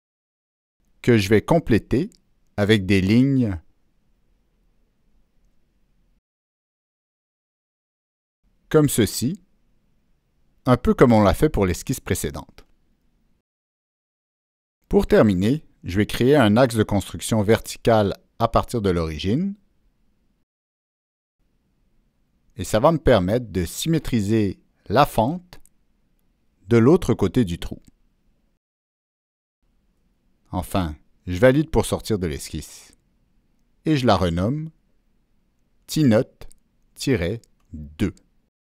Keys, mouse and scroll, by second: 0.6-1.0 drag, 1.6-2.0 drag, 3.6 Escape, 3.6 click, 3.8 right drag, 5.1 click, 5.1 right click, 5.8 click, 6.9 click, 6.9 right click, 7.0 right click, 8.3 click, 9.3 click, 10.0 Escape, 10.9 middle click, 11.1-12.4 middle drag, 13.5 right click, 15.3 click, 15.5 right click, 17.2 click, 18.8 click, 19.6 Escape, 19.7 Escape, 21.0-22.0 drag, 23.5 click, 24.9 click, 26.2 click, 28.3 click, 31.0 Escape, 31.0 click, 31.8 Escape, 31.8 click, 32.6 Escape, 32.9 click, 34.2 click, 35.3 click, 37.0 click, 37.8 Return.